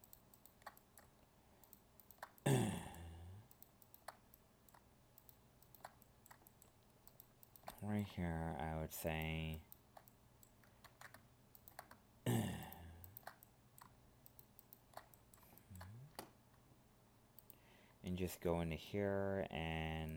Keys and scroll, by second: 10.8 ctrl+z.